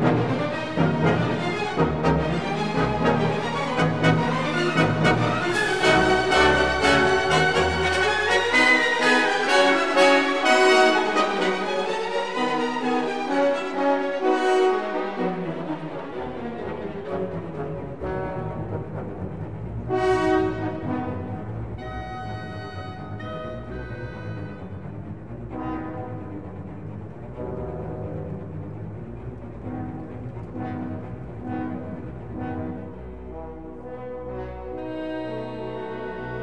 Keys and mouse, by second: 0.4 x, 2.2 click, 3.1 s, 3.3 x, 4.4 click, 4.7 s, 4.9 y, 6.1 click, 9.0 s, 9.1 z, 10.2 click, 11.4 ctrl+a, 12.9 ctrl+2, 15.0 Tab, 16.5 ctrl+r, 18.8 click, 19.5 ctrl+r, 21.2 click, 24.8 alt+z, 26.3 3, 26.8-27.5 drag, 28.2 g, 28.7 y, 29.5 x, 32.3 click, 33.4 ctrl+r, 36.2 click.